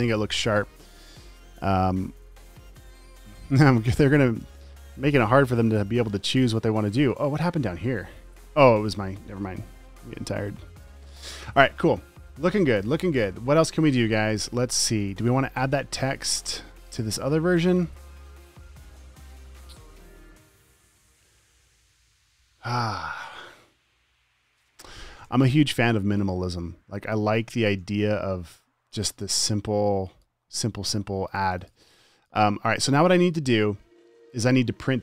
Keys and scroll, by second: 5.7 super+s, 15.2 space, 17.9 space, 20.4 space, 25.8-28.1 typing, 31.1-34.6 typing.